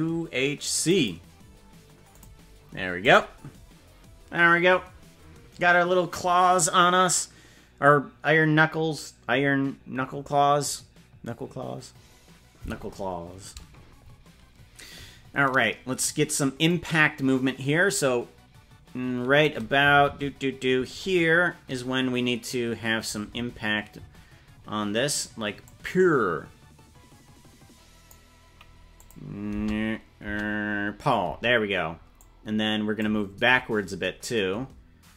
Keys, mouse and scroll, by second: 13.5-14.7 typing, 16.7-19.4 drag, 19.9 Right, 20.1 Right, 23.3 Right, 23.5 Right, 24.1 Right, 25.6-28.1 drag, 29.0 click, 29.6 alt+space, 30.2 space, 31.3 space, 32.2 click.